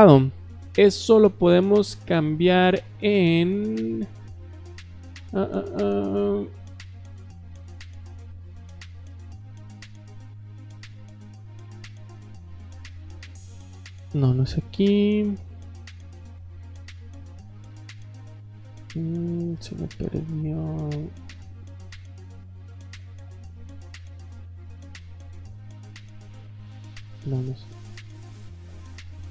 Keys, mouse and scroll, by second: 2.3 click, 6.6 click, 12.6 click, 13.8 middle click, 14.7 click, 26.6 click, 27.8 click.